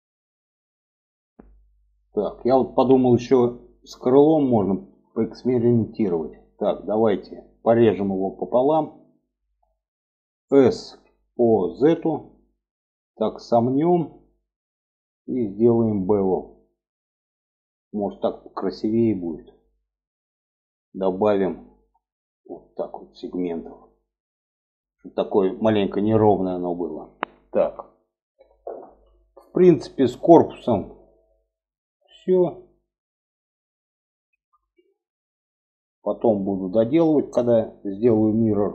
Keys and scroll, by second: 10.1 s.